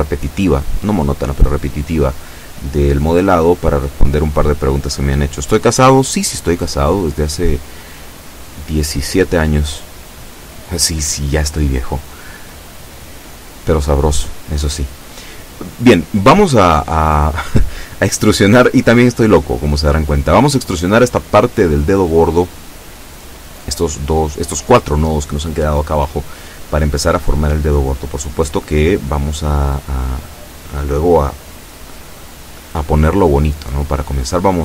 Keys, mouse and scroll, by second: 9.9 a, 11.2 b, 13.7-17.0 drag, 25.8 e, 32.3-33.6 drag.